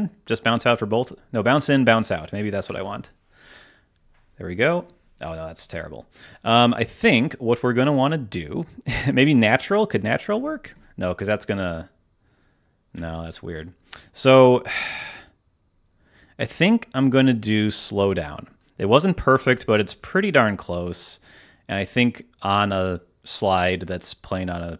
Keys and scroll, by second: 2.6 space, 5.6 space, 6.7 space, 10.3 space, 13.2 space, 19.3 space.